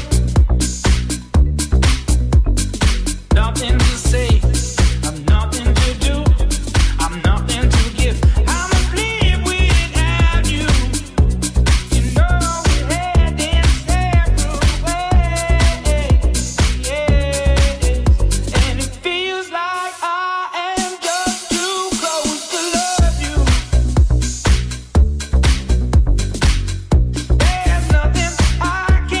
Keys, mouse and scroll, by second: 0.0 click, 0.4 ctrl+z, 0.8-2.1 drag, 1.2 c, 1.9 c, 3.5-9.6 drag, 7.3 middle click, 7.3 right click, 7.3 1, 7.7 middle click, 7.7 right click, 8.1 middle click, 8.1 right click, 9.4 j, 12.0-29.2 shift+drag, 12.0 3, 12.5 shift+middle click, 12.5 shift+right click, 12.5 j, 12.7 shift+middle click, 12.7 shift+right click, 14.9 middle click, 14.9 right click, 15.8 middle click, 15.8 right click, 16.4 middle click, 16.4 right click, 17.5 right click, 23.9 middle click, 23.9 right click, 25.9 c, 26.9 middle click, 26.9 right click, 27.2 c.